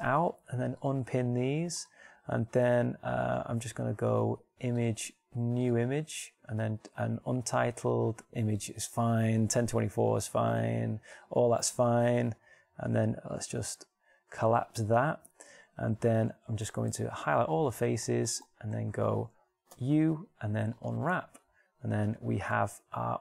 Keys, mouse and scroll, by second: 17.3-17.9 a, 18.6 middle click, 20.2 u.